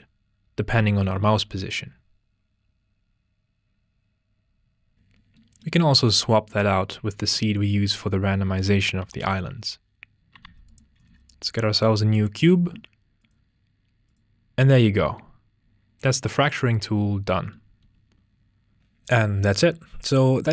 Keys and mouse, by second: 0.3 click, 0.7 w, 1.7 click, 1.8 w, 5.3 middle drag, 6.5 drag, 8.6 click, 9.0 x, 10.1 ctrl+space, 10.3 a, 10.4 x, 11.1 shift+a, 12.8 ctrl+z, 13.2 click, 15.4 click, 16.9 ctrl+z, 17.1 click, 17.9 z, 18.6 drag, 19.0 click.